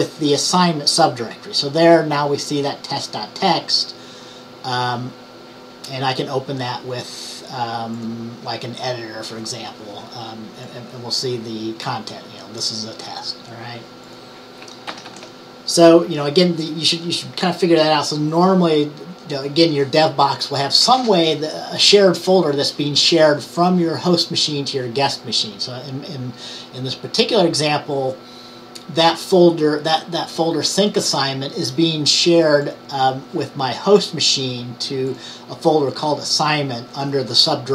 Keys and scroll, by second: 15.0 ctrl+x, 15.1 ctrl+c.